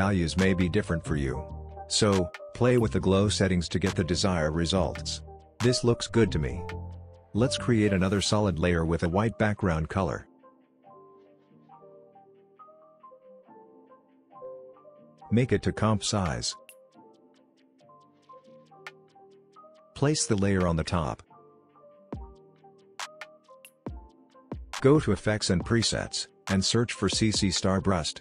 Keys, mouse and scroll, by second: 0.3-1.2 scroll down 1, 1.2-4.3 drag, 5.2-7.0 scroll up 1, 7.1 right click, 7.8 click, 10.5-11.7 typing, 16.1 click, 18.3-21.3 drag, 24.9-26.2 typing, 27.4-28.2 drag.